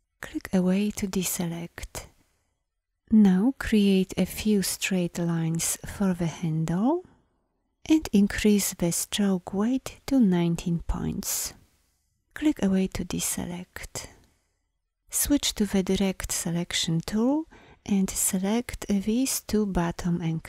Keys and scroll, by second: 15.6 a.